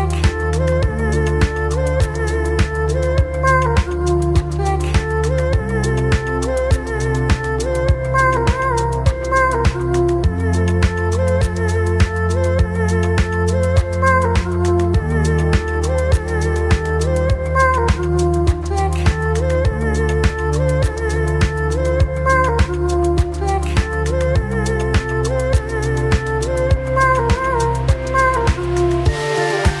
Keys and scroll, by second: 2.9 F4, 4.0 F4, 4.5 F4, 6.5 F4, 7.2 alt+F4, 8.5 z, 13.8 s, 14.5 ctrl+z, 15.1 w, 15.7 ctrl+z, 18.1 ctrl+t, 18.3 1, 18.7 s, 21.2 5, 21.7 r, 23.0-23.9 typing, 25.0 F4, 25.8 F4, 27.8 F4, 29.3 F4.